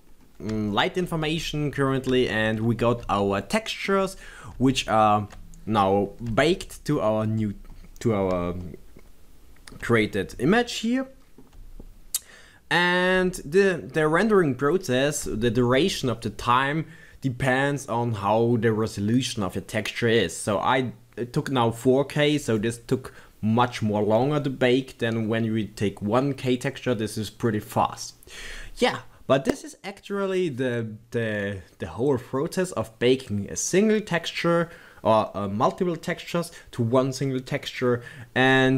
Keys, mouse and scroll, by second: 0.0-1.4 right drag, 1.4 Tab, 25.4 middle click, 26.6-30.3 middle drag.